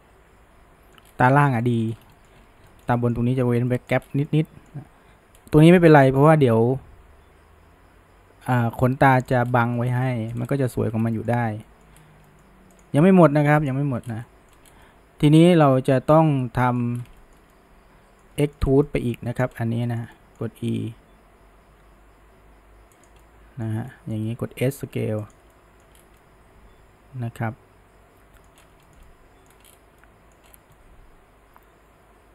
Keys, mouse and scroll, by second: 1.1 scroll, 1.3-1.9 shift+middle drag, 1.9-2.7 scroll, 2.2 shift+middle drag, 2.7-4.1 shift+middle drag, 4.1 scroll, 4.3-5.4 middle drag, 5.4 scroll down 1, 5.7-8.7 middle drag, 9.1-9.5 middle drag, 9.5 scroll, 9.8-10.4 shift+middle drag, 10.4 scroll, 11.2-12.0 shift+middle drag, 12.3-12.8 middle drag, 12.8 click, 13.6 alt+shift+click, 14.1 scroll down 3, 14.3 middle click, 14.6 scroll up 1, 14.9-17.0 middle drag, 17.0 scroll down 1, 17.2-18.6 shift+middle drag, 18.6 shift+scroll up 2, 18.9-19.5 middle drag, 19.5-19.9 scroll up 1, 19.9-21.7 shift+middle drag, 21.7 e, 23.2-24.4 middle drag, 24.4 s, 25.6-26.0 middle drag, 26.0 scroll, 26.2-28.6 middle drag, 28.6 scroll up 1, 28.9-29.5 shift+middle drag, 29.5-30.0 scroll up 1, 30.0-30.5 middle drag, 30.5 scroll, 30.8-32.3 middle drag.